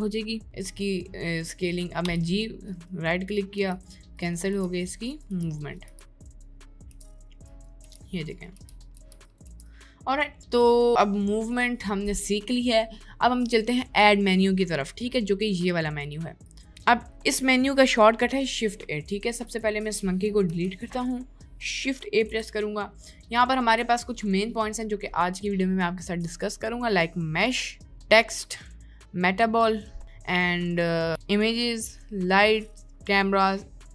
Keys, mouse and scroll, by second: 2.2 g, 3.7-9.5 typing, 16.7-18.7 drag, 19.5 click, 20.5 Delete, 22.3 shift+a, 23.8 shift+a.